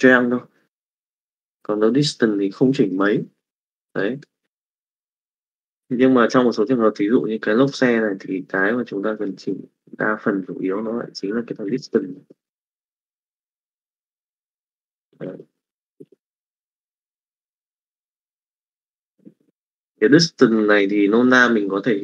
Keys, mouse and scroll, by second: 4.0 middle click, 6.1 click, 8.7 click, 11.0-12.3 drag, 13.8-16.2 drag, 17.4 middle click, 18.7 middle click, 19.4 middle click, 20.2 middle click.